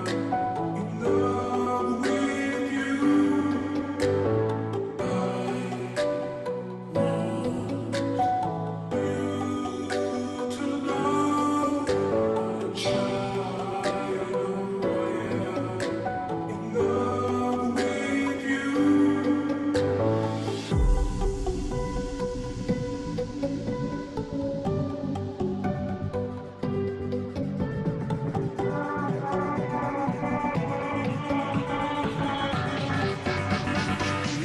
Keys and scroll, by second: 0.0-34.4 typing, 1.1 ctrl+t, 14.8 ctrl+j.